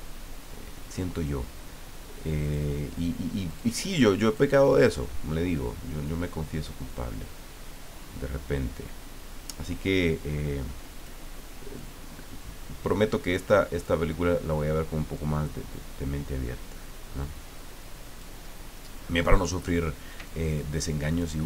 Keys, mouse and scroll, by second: 2.4 click, 3.5 click, 4.3 click, 6.8-11.3 drag, 11.8-14.0 drag, 15.1-18.4 drag, 20.2-21.4 drag.